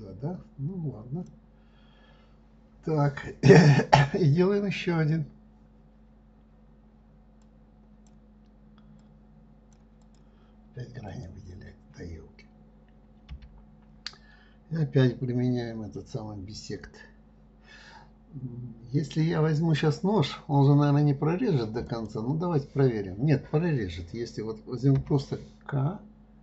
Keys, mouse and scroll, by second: 7.8 click, 9.4 click, 11.5 click, 13.7 l, 22.3 click.